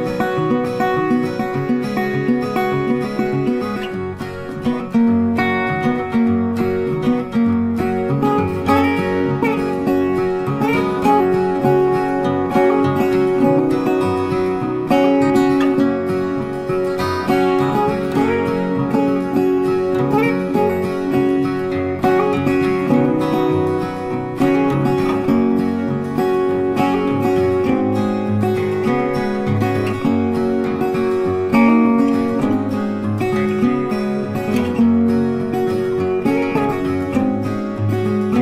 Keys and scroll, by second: 20.4 ctrl+t.